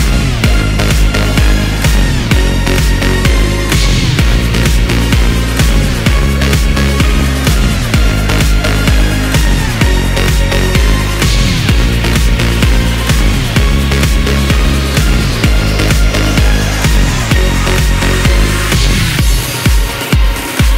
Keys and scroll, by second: 3.0 ctrl+c, 12.1 space, 12.2 shift+n, 17.6 o, 18.9-19.9 typing.